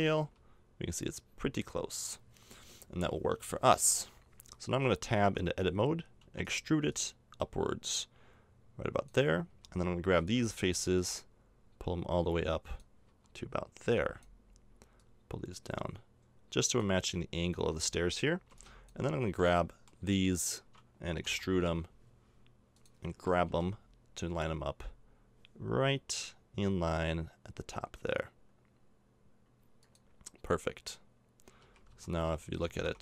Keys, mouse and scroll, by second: 2.9 middle click, 3.4 Tab, 3.7 Tab, 5.2 Tab, 6.2 e, 6.9-8.7 drag, 9.5 a, 10.2 b, 11.0-12.9 drag, 13.1 a, 13.8 b, 15.0-16.8 drag, 17.5 a, 18.5 b, 19.5-20.7 middle drag, 21.2 e, 23.6 g, 31.6 a, 31.9 z, 32.6 a, 32.8 Tab.